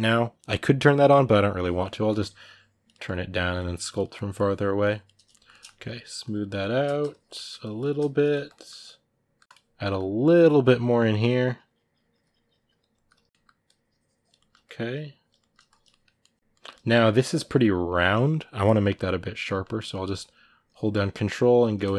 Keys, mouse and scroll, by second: 1.8 middle click, 2.2 click, 2.7 middle click, 3.1 click, 3.8 middle click, 4.1 click, 5.1 ctrl+middle click, 5.5-6.6 shift+drag, 6.6 middle click, 6.9 shift+click, 7.1 middle click, 7.4 shift+click, 7.6-9.4 middle drag, 9.4 click, 9.6 ctrl+middle click, 10.1-12.7 drag, 12.7 ctrl+middle click, 13.1 shift+click, 13.3 middle click, 13.4 click, 14.1 ctrl+middle click, 14.4 shift+click, 15.1 middle click, 15.4 shift+click, 15.6-18.8 middle drag, 18.8 ctrl+click, 19.2 middle click, 20.0-21.8 ctrl+drag, 21.8 middle click.